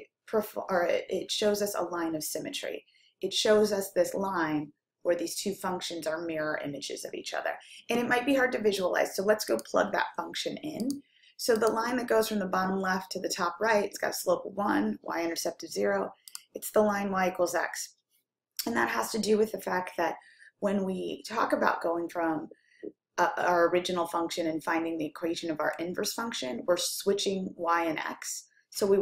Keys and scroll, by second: 10.9 Down, 11.7 Down.